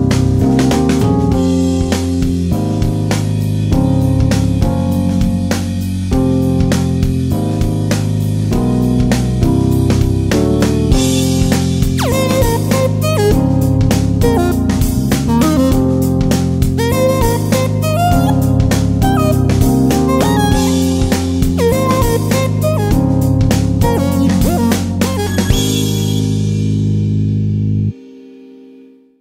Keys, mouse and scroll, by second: 12.7-15.6 drag, 18.8 click.